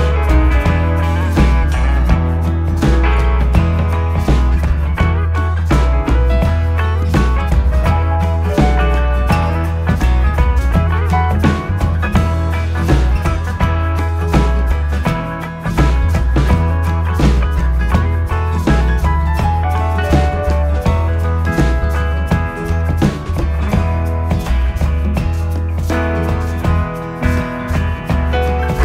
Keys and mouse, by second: 1.3 alt+click, 3.1 s, 5.9 click, 8.8 alt+click, 11.0 s, 17.1 click, 20.1 alt+click, 21.6 s, 23.3 click, 24.4 shift+middle click, 27.2 alt+click.